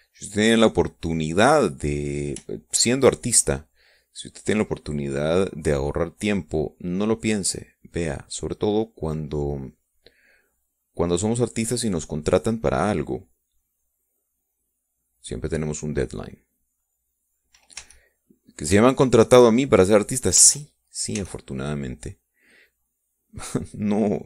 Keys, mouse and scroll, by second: 3.8-4.9 shift+drag, 5.2 shift+click, 6.4-18.9 drag, 19.2 e, 19.4 click, 20.2 shift+click, 21.3 click, 21.8 ctrl+z, 22.6 e, 23.1-24.2 drag.